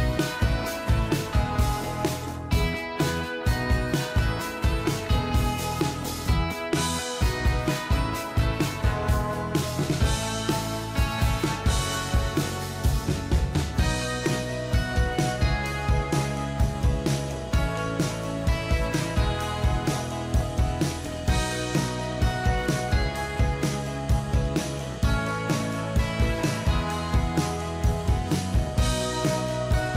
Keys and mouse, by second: 6.0 click, 7.7 ctrl+click, 11.8 Right, 18.0 ctrl+-, 18.6 ctrl+=, 19.0 ctrl+=, 19.3 ctrl+=, 26.4-28.9 typing, 29.2 ctrl+a.